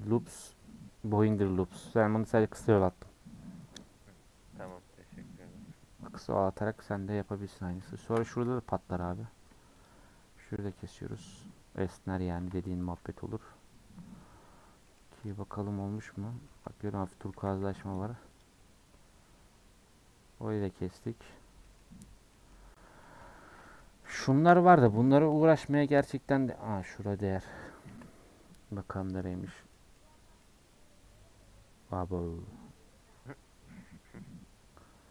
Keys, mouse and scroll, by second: 6.4 click, 6.6 scroll down 4, 6.9 scroll up 1, 6.9 middle click, 7.5 scroll up 2, 7.7-9.0 shift+middle drag, 9.0 alt+click, 9.9 alt+shift+click, 11.2 alt+shift+click, 12.3 alt+shift+click, 13.2-13.7 scroll down 6, 15.3 click, 17.3 a, 19.4 u, 21.3 click, 27.9 KP_Decimal, 28.8 scroll down 1, 29.1 middle click, 29.5-30.4 scroll down 8, 29.7 middle click, 30.4-33.5 middle drag.